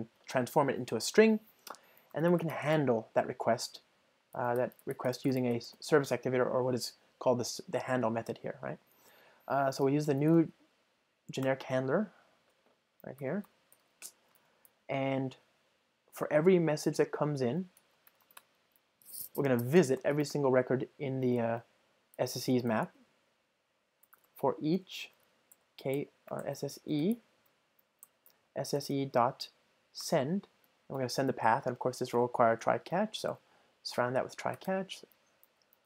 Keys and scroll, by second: 2.8 Return, 11.5 Return, 21.5 ctrl+alt+shift+Left, 24.8 alt+shift+Left, 30.1 Return, 32.2 alt+Return.